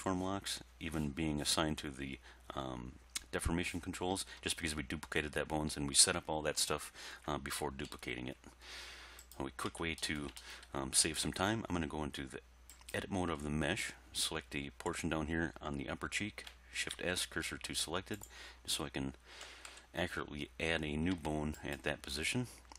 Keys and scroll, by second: 7.9 1, 9.7 Tab, 17.0 shift+s, 19.4 1, 19.7 3, 21.2 Tab.